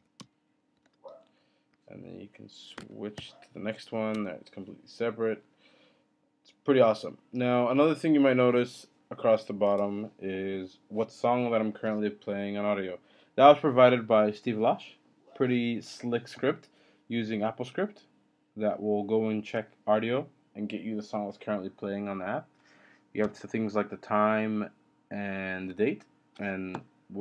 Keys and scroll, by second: 1.5 %, 2.8 ctrl+b, 4.1 typing.